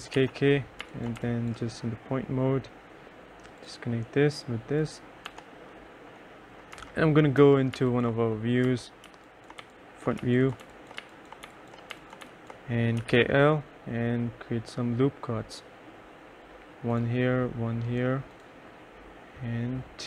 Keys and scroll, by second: 0.0 k, 0.9 2, 1.3 3, 5.4 F1, 6.8 F4, 7.5 F3, 7.9 2, 8.7 F4, 9.2-13.7 typing.